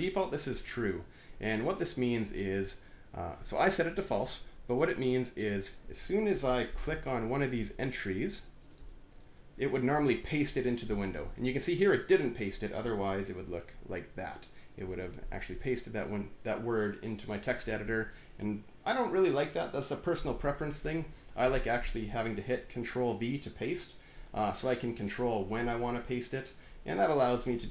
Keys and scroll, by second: 6.6 alt+`, 13.2 ctrl+v, 21.1 ctrl+z, 27.6 alt+`.